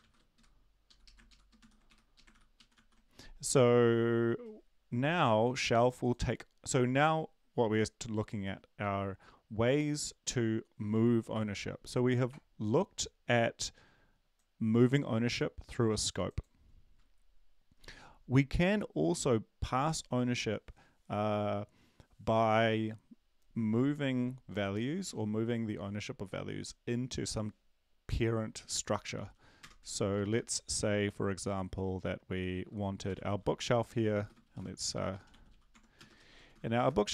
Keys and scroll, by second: 0.0 Right, 0.0 ctrl+Left, 0.1-1.8 typing, 2.1 ctrl+shift+Left, 2.3 ctrl+x, 2.6 Delete, 2.7 ctrl+v, 25.1 Down, 25.1 End, 33.4-37.1 typing.